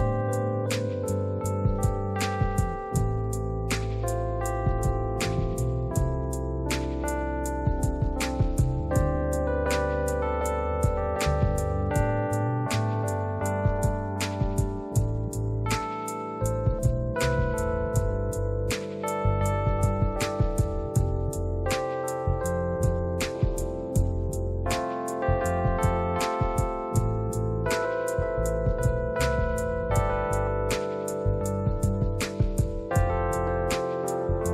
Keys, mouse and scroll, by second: 0.7-1.9 scroll up 2, 2.1 scroll up 1, 4.3 click, 7.1 click, 8.1 scroll up 2, 15.5 right click, 18.7 click, 20.8 click, 21.6-22.7 scroll up 1, 22.7-23.2 scroll down 1, 23.8 space, 24.3 space, 24.7 click, 26.8 space, 27.3 click, 29.6 click, 34.1 click.